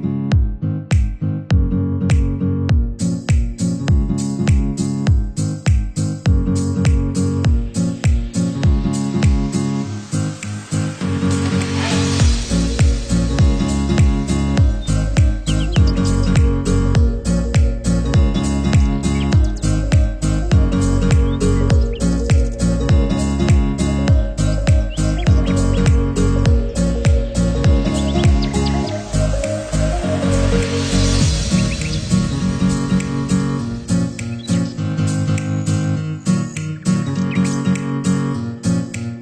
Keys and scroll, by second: 2.5 Delete, 11.3 ctrl+0.